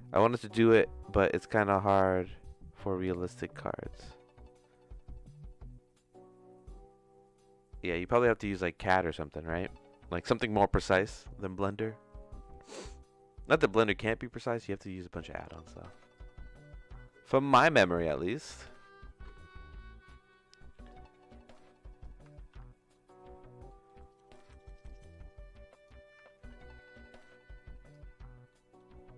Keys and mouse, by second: 10.7 middle click, 12.6 middle click, 13.7 middle click, 14.3 click, 15.5 middle click, 16.1-18.1 drag, 18.3 ctrl+z, 20.0 middle click, 20.9-22.0 drag, 22.4 ctrl+z, 23.0 middle click, 23.7 middle click, 24.8-25.8 drag, 26.4 ctrl+z, 26.5-27.9 drag, 28.5 middle click.